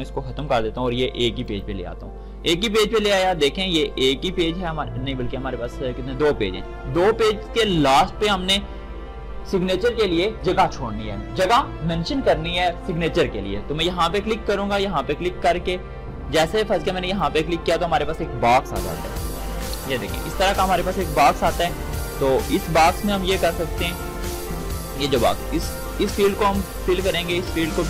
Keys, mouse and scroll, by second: 0.3 BackSpace, 1.4-9.7 drag, 15.1-19.4 drag, 19.4 ctrl+shift+d.